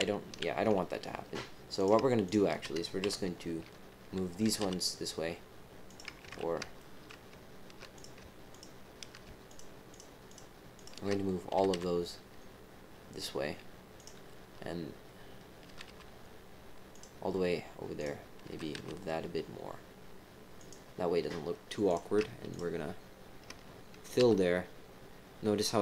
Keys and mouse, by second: 1.7 click, 2.2 shift+click, 3.0 KP_7, 4.4 g, 6.2 ctrl+z, 6.7 shift+click, 7.9 click, 8.5 shift+click, 9.4 shift+click, 10.2 shift+click, 10.7 shift+click, 11.5 g, 15.6 g, 17.9 click, 18.4 g, 21.8 click, 22.5 shift+click, 24.0-24.7 typing.